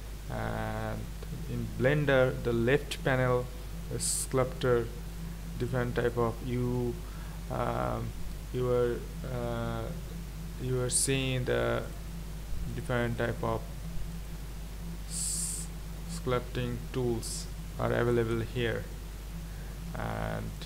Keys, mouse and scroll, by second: 0.0 KP_1, 4.6 click, 5.2 click, 5.7 click, 6.1-12.9 drag, 13.3-14.3 drag, 15.4-16.0 scroll up 4, 16.2 scroll up 2.